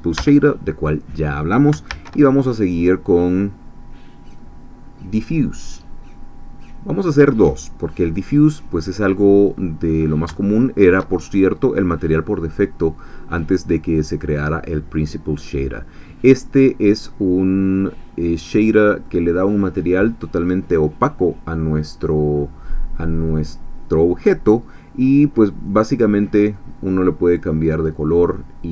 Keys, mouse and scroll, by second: 0.3 x, 1.9 shift+a, 8.0 click, 9.4 click, 9.9 scroll up 1, 10.4 shift+click, 11.2-12.5 shift+scroll up 3, 12.5 click, 14.3-14.8 scroll up 2, 16.9-19.2 middle drag, 25.7 click, 26.5-28.0 drag.